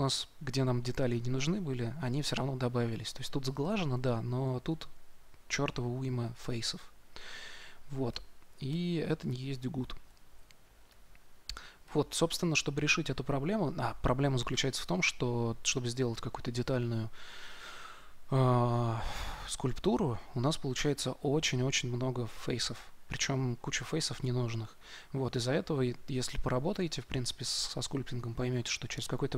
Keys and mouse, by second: 7.3 middle click.